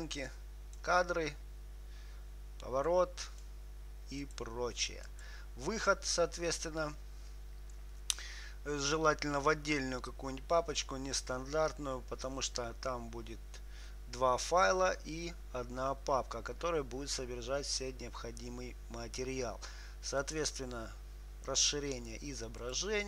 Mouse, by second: 0.6-2.6 drag, 3.2-7.9 drag.